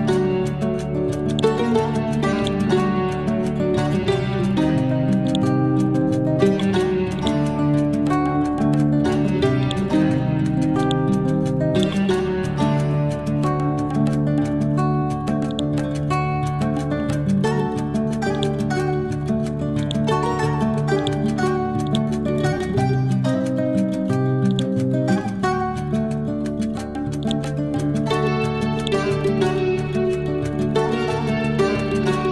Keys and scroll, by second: 8.7 ctrl+z, 16.9 ctrl+z, 23.1 ctrl+Home.